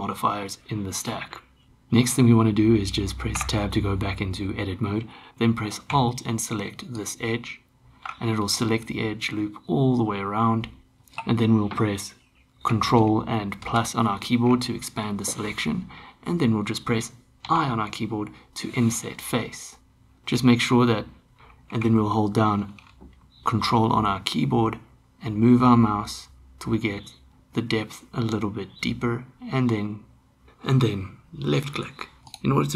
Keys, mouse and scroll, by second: 1.7 Tab, 3.4 Tab, 8.4-10.9 middle drag, 13.7 ctrl+KP_Add, 17.4 i, 32.2 click.